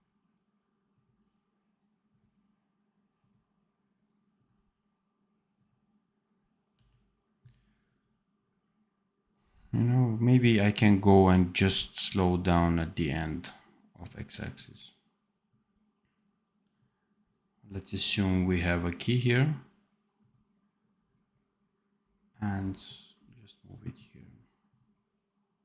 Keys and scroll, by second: 6.6 d.